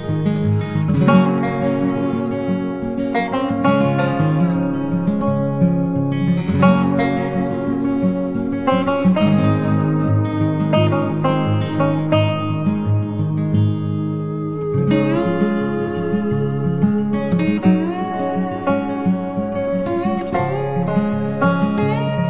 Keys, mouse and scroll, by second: 18.2 double click.